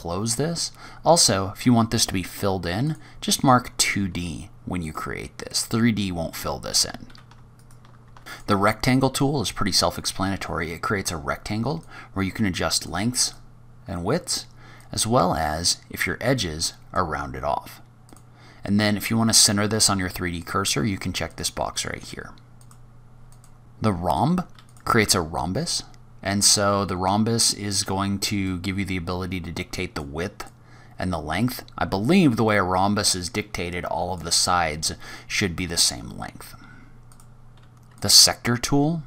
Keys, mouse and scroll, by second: 2.8 click, 4.7 click, 6.0-6.7 scroll down 4, 6.7-7.3 scroll down 3, 7.3 shift+right click, 7.4 shift+a, 7.6 click, 7.7 Tab, 7.7 shift+a, 8.7-9.0 scroll down 2, 9.1-11.6 scroll up 6, 11.6 click, 13.2 click, 14.7 click, 18.0 click, 21.3 click, 22.4 click, 22.7 click, 22.8 click, 22.8 scroll down 4, 23.0 shift+right click, 23.0 scroll up 3, 23.1 Tab, 23.1 shift+a, 25.4-25.8 scroll down 4, 25.8-26.9 scroll up 7, 28.3 click, 30.3 click, 34.6-35.1 scroll down 5, 35.1-35.5 scroll up 2, 35.5 scroll down 1, 35.6-36.1 scroll down 3, 36.1-36.8 scroll up 1, 36.8 click, 37.1 shift+right click, 37.1 shift+a, 37.3 Tab, 37.4 shift+a, 38.7-39.0 scroll up 7.